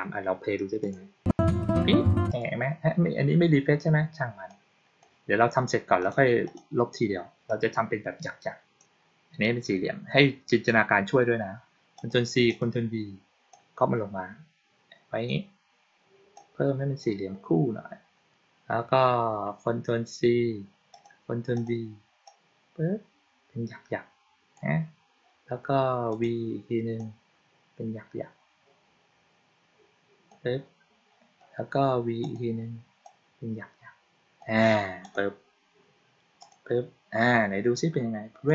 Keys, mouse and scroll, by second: 0.7 click, 2.2 click, 4.4-4.9 drag, 5.9 click, 6.3 click, 7.3-8.7 drag, 11.8 click, 12.3 click, 13.4-15.1 drag, 16.2 click, 20.8 click, 21.4 click, 22.1-24.4 drag, 26.0 click, 26.8-30.2 drag, 32.1 click, 32.9-34.3 drag, 34.9 click, 36.3 click, 38.3 click.